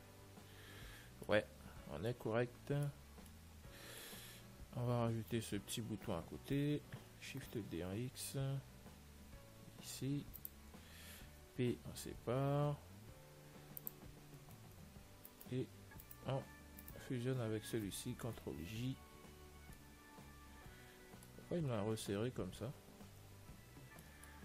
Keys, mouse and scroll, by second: 0.4-2.4 middle drag, 5.0 Tab, 6.8 middle click, 7.8 shift+d, 12.0 p, 15.1 Tab, 15.8-18.9 right drag, 18.7 ctrl+j, 19.9-23.5 middle drag, 24.0-24.4 middle drag.